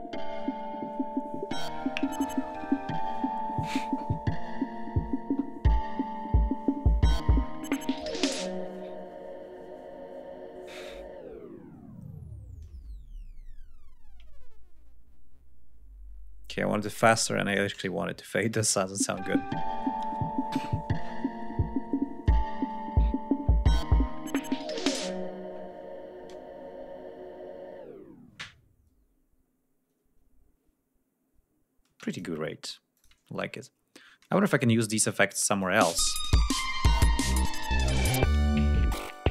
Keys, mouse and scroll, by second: 14.5 ctrl+scroll up 2, 16.5 click, 17.5 click, 17.9 ctrl+scroll down 2, 18.5 ctrl+space, 18.8 ctrl+click, 31.9 space, 32.2 click, 33.0 click, 33.4-33.9 ctrl+scroll down 2, 33.9-34.5 ctrl+scroll down 1, 35.6 click, 35.8 space, 36.1 ctrl+scroll up 2, 37.5 scroll down 2, 39.0 ctrl+scroll up 2.